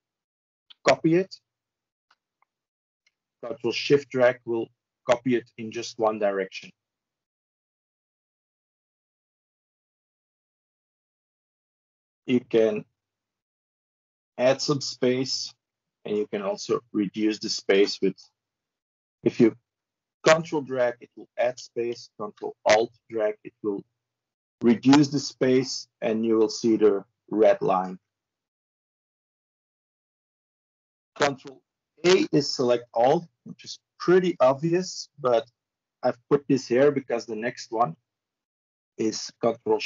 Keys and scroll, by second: 7.0 ctrl+z, 31.8 ctrl+a.